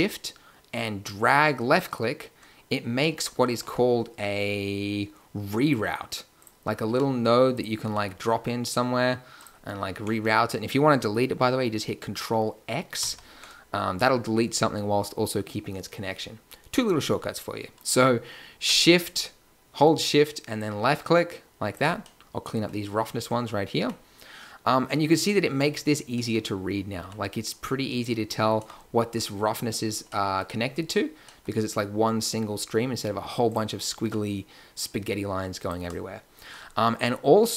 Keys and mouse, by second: 1.0-3.4 drag, 3.4 shift+a, 6.9 g, 7.8 g, 12.9 ctrl+x, 22.1 click, 23.7 g, 26.9 g, 28.5 a, 33.4 click, 34.0 g, 35.8 a.